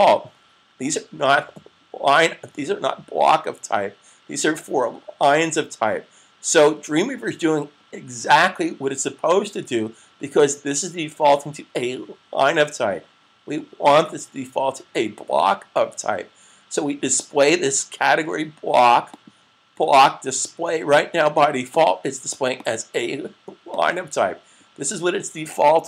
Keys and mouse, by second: 19.0 click, 21.6 click.